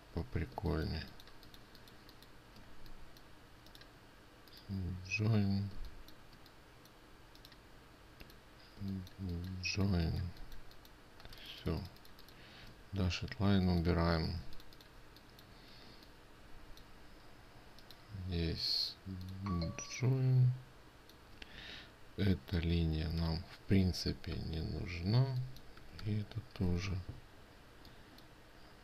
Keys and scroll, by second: 14.9 ctrl+space, 20.1 ctrl+space.